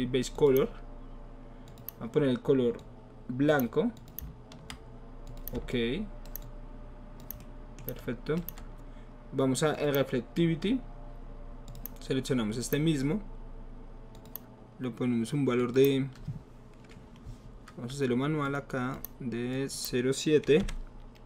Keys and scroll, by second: 20.6 KP_7.